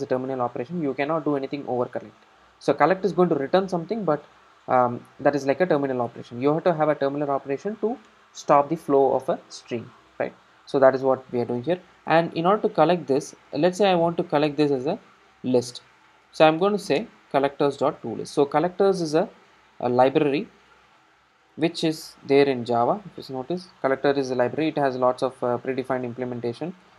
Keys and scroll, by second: 17.1 Return, 23.2 super+b.